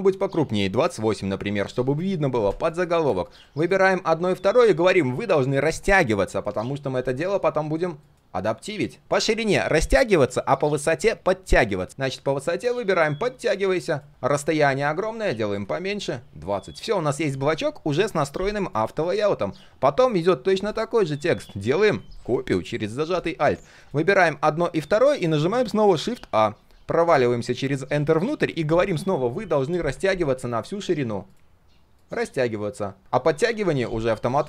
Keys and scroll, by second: 14.1 ctrl+z.